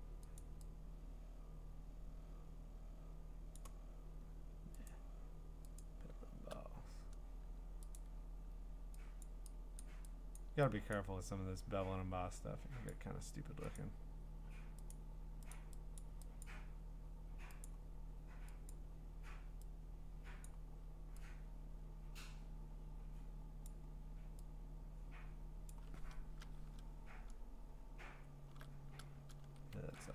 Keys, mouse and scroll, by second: 0.4 click, 4.9 click, 5.8 click, 8.0 click, 9.2 click, 9.8 click, 10.4 click, 10.9 click, 12.9 click, 13.8 click, 14.9 click, 15.5 click, 16.0 click, 16.4 click, 17.6 click, 18.7 click, 20.4 click, 23.6 click, 25.7 click, 26.2 Return, 26.9-28.4 scroll, 29.4 ctrl+z.